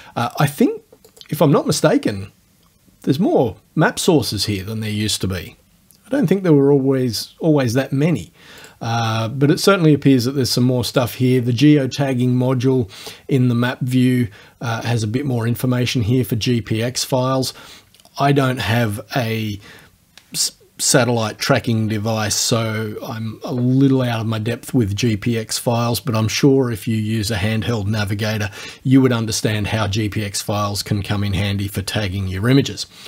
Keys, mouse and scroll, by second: 1.1 click, 8.6 click, 10.9 click.